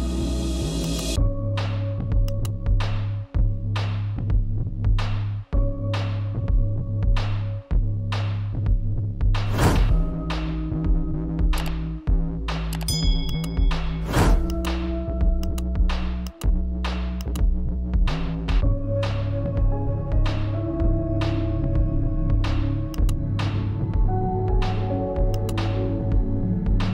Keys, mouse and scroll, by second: 11.9 click, 13.0-20.4 shift+drag, 22.4 click, 24.3 click.